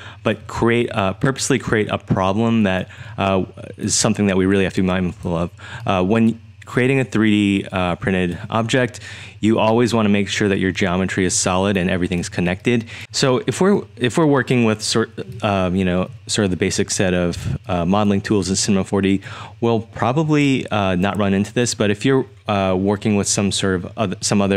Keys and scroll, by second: 0.0-9.7 typing, 11.2-13.0 typing, 15.3-16.0 typing, 17.3-19.2 typing.